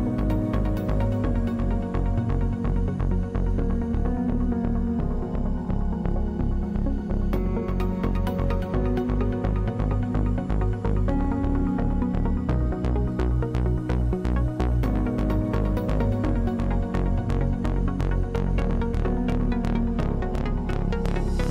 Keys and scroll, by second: 7.5 ctrl+z, 17.1 ctrl+z.